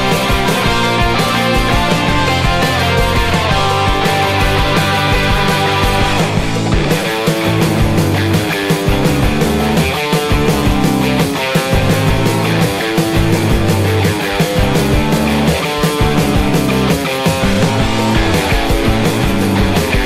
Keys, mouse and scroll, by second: 0.8 Tab, 1.1 Tab, 7.4 z, 7.6 z, 7.8 a, 12.3 middle click, 13.2 Tab.